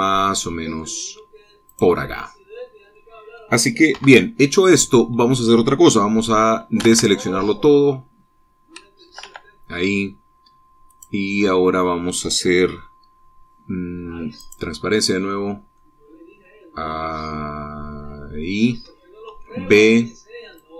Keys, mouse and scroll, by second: 2.2 click, 2.8-4.1 middle drag, 4.5 KP_1, 7.5 a, 9.7 a, 11.5 click, 14.9 click, 16.3-19.2 middle drag, 19.2-19.9 scroll up 2, 19.4 b.